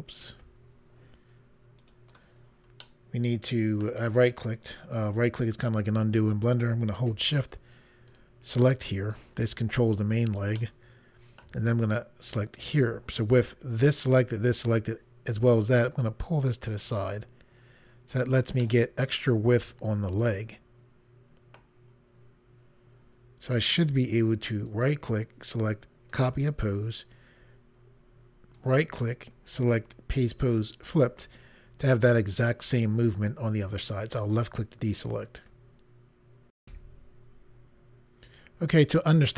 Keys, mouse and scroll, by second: 1.8 right click, 2.8 middle click, 8.1 shift+click, 10.5 middle click, 12.4 shift+click, 16.0 click, 18.6 middle click, 24.7 right click, 26.1 click, 28.6 right click, 30.4 click, 34.2 click, 36.6 Pause.